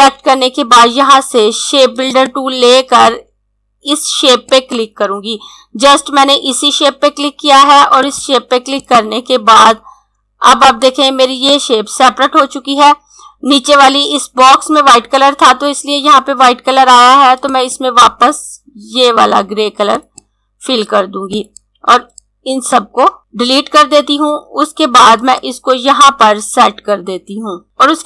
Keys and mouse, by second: 2.0 click, 7.8 click, 16.9 click, 23.4 Delete, 25.3 click.